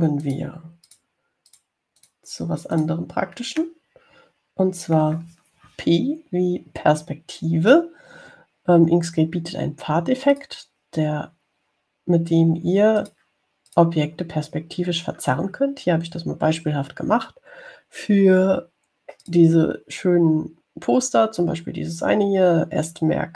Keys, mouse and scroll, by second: 0.4 middle click, 1.4 click, 2.1 click, 2.7 click, 4.0 click, 4.8 click, 5.3-6.5 middle drag, 11.6 click, 14.3 click, 14.9 click, 20.5 click.